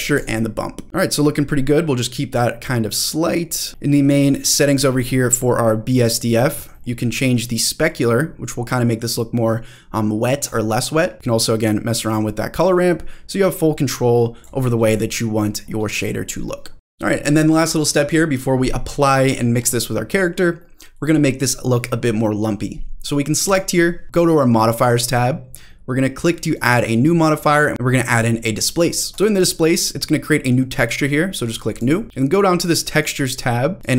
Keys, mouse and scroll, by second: 0.8-2.4 drag, 0.8 middle click, 0.8-1.2 scroll up 3, 3.7 scroll down 1, 3.9 middle click, 4.4 middle click, 4.8-5.7 scroll down 3, 5.7-6.7 scroll up 5, 6.7 middle click, 7.2 middle click, 7.8-10.4 drag, 11.1-12.1 drag, 12.6-14.4 drag, 14.7-15.1 scroll down 1, 15.1-15.6 scroll up 3, 15.6-16.7 scroll down 1, 16.7 shift+middle click, 16.7 scroll down 2, 19.1-19.9 scroll down 5, 19.9-20.6 scroll up 3, 20.6 middle click, 23.5 click, 24.0 click, 26.5-29.1 drag, 29.1-30.9 scroll down 3, 31.8 click, 32.9 click, 33.8 drag.